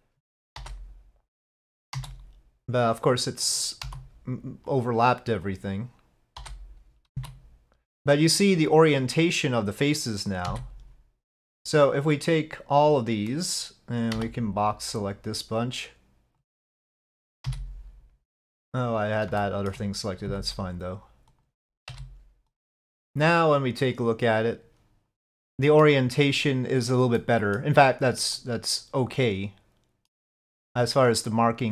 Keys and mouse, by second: 0.6 l, 2.0 s, 3.9 g, 6.4 l, 7.2 s, 10.5 g, 11.0 l, 14.2 b, 17.5 g, 19.4 shift+click, 20.3 s, 21.9 s, 22.0 g, 24.0 click.